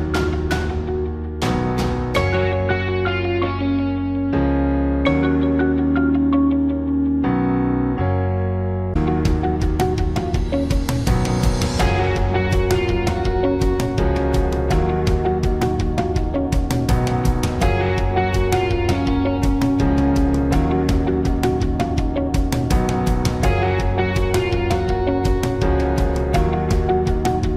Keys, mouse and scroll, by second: 2.6 click, 3.2-4.3 drag, 4.4 click.